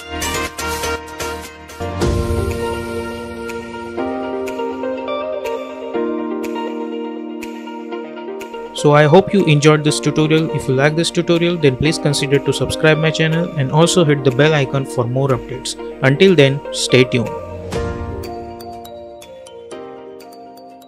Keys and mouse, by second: 0.9 space.